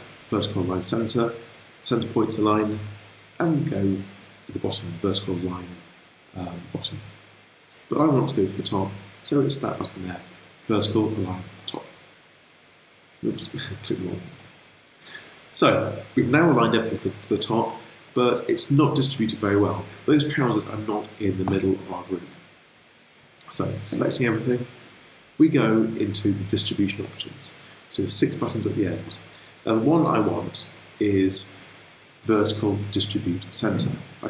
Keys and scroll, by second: 2.4 super+z, 2.9 super+z, 8.0 super+z, 13.5 super+z.